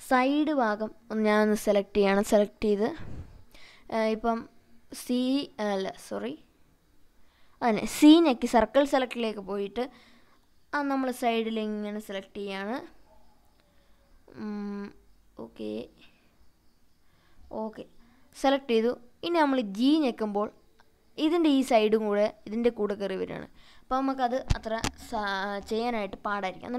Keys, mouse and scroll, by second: 1.1 c, 18.6 scroll down 3, 19.5 g, 25.0 right click, 26.4-26.7 right drag.